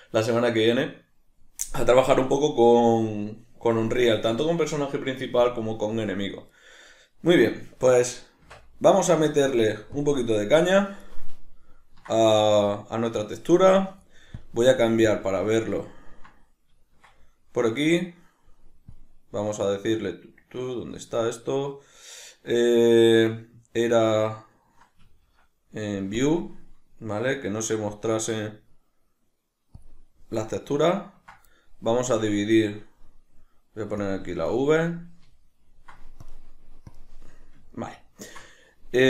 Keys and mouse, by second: 14.3-15.9 drag, 15.9-18.9 ctrl+middle drag, 18.9-30.8 drag, 30.8-32.2 ctrl+middle drag, 32.2-35.4 drag, 35.4 ctrl+middle click, 36.2-37.7 drag, 37.7-39.0 ctrl+middle drag.